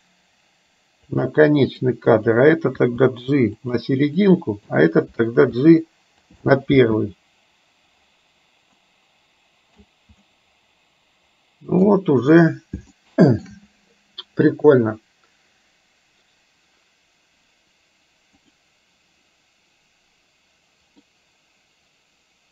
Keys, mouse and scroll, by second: 1.9 click, 2.9 g, 4.3-4.6 drag, 5.6 g, 6.9 space, 8.8-9.9 middle drag, 10.3-11.9 middle drag, 13.0-13.6 shift+middle drag, 18.5 click, 21.0-22.5 middle drag.